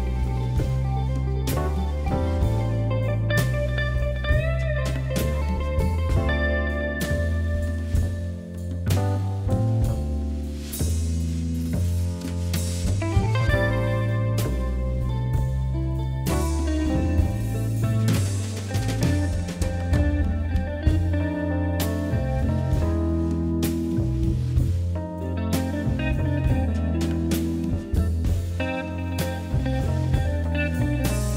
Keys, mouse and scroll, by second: 0.1-0.6 scroll up 3, 0.7 g, 2.4 e, 5.7 e, 7.0 KP_3, 8.2 e, 10.4 e, 13.0 KP_3, 13.8 ctrl+KP_3, 14.4-15.5 scroll up 2, 15.5 KP_1, 16.5 ctrl+KP_1, 17.9 g, 19.2 scroll down 1, 19.4 shift+middle click, 20.0 e, 23.3 middle click, 24.3 a, 25.8 q, 27.3-27.9 middle drag, 27.9 KP_3, 28.1 KP_1, 29.3 g.